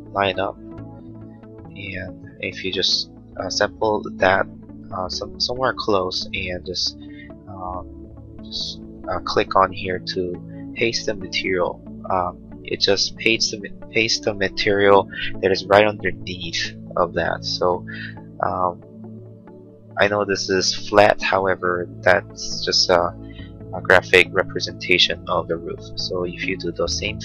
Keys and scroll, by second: 12.3 space.